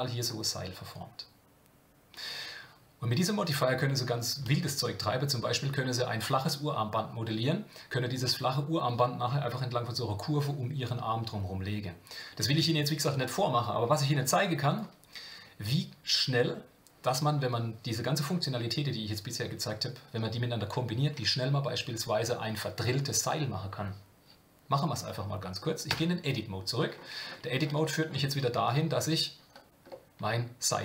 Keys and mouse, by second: 14.7 click, 25.9 Tab, 27.8 shift+middle click, 28.6 KP_Divide, 29.9-30.8 middle drag.